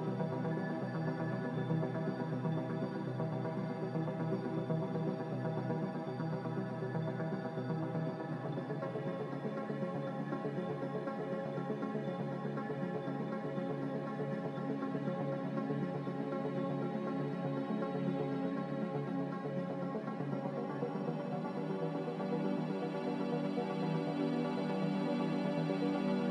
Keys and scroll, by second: 5.1 q, 15.7 q, 24.1 q, 25.9 ctrl+w.